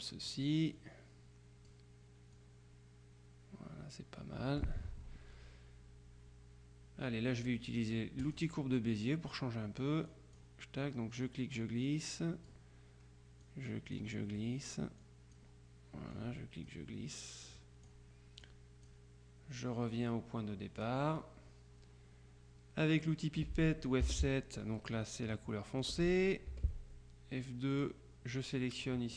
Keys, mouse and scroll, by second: 2.4-5.2 drag, 8.3 click, 10.2 click, 11.3-13.1 drag, 13.5-14.5 drag, 16.2-17.2 drag, 17.6 click, 18.5 click, 20.9 click, 24.1 F7, 25.9 click, 26.6 F2, 27.8 click.